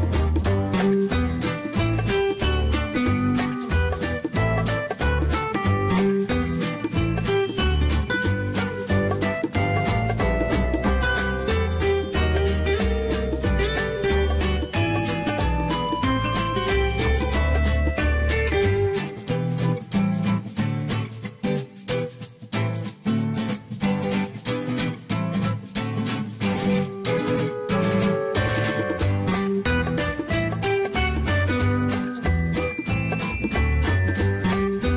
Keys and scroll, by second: 22.9 1, 24.1 Return.